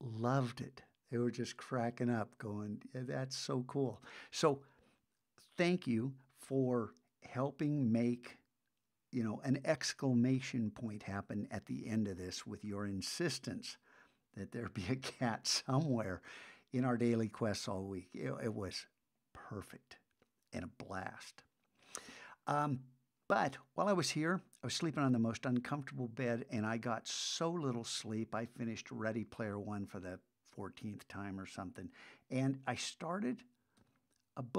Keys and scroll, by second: 33.8 super+Tab.